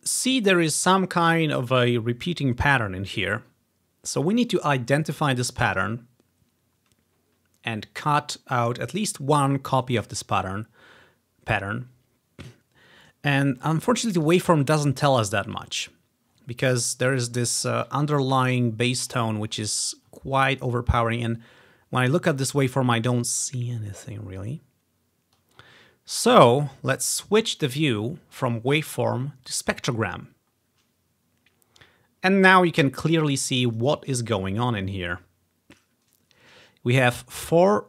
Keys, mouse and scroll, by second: 13.8-14.6 ctrl+scroll up 1, 14.9 ctrl+scroll down 2, 15.6 ctrl+scroll up 2, 16.4-16.7 ctrl+scroll down 4, 17.5 scroll up 1, 18.3 scroll up 1, 19.0 scroll down 4, 20.2-21.1 scroll down 2, 21.2-22.1 scroll up 3, 23.2 ctrl+scroll down 1, 23.7 ctrl+scroll up 1, 24.1-24.7 ctrl+scroll down 3, 25.1 ctrl+scroll up 1, 25.8 ctrl+scroll down 1, 27.7 click, 29.6-31.9 drag, 32.8-33.9 drag, 35.0-36.2 scroll up 2.